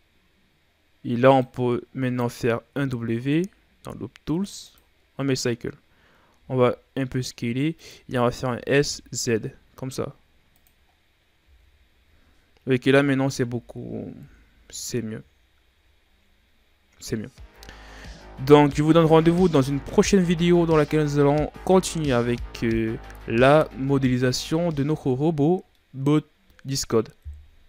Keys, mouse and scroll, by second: 2.6 w, 6.2 s, 8.3 s, 10.8 scroll down 5, 11.3 z, 12.7 KP_Divide, 13.3 Tab, 14.1 KP_1, 14.5 a, 15.1-15.8 scroll down 5, 15.8-16.9 ctrl+scroll down 6, 16.9-17.5 scroll up 5, 17.5-17.9 scroll down 3, 17.9-18.9 middle drag, 18.9-19.6 scroll up 2, 19.6-20.0 scroll down 3, 20.0-20.8 middle drag, 20.8-21.7 scroll up 3, 21.7-23.8 middle drag, 23.8 scroll down 1, 24.1-25.2 middle drag, 25.2-25.6 scroll up 3, 25.6-26.3 middle drag, 26.3-27.1 ctrl+scroll up 2, 27.1 KP_3.